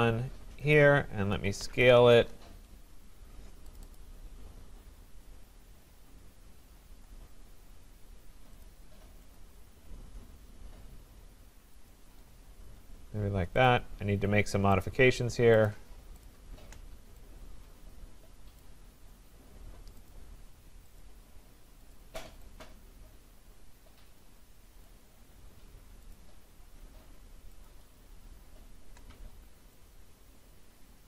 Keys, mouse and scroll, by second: 0.8 click, 1.1-2.5 typing, 3.8 click, 4.0 click, 4.8-5.9 scroll, 6.7-7.6 scroll, 7.1 typing, 8.6 click, 9.4 click, 11.9 click, 13.7 click, 14.9 shift+click, 15.7 click, 16.3 click, 18.6 click, 20.1 click, 21.0 shift+click, 21.9 click, 24.9 click, 27.6 shift+click.